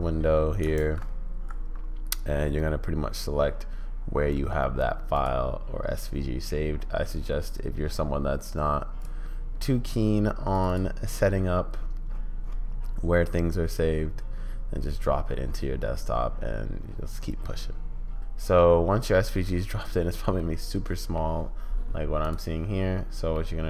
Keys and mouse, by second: 18.3-18.7 middle drag, 19.5-21.1 middle drag, 23.3-23.6 middle drag.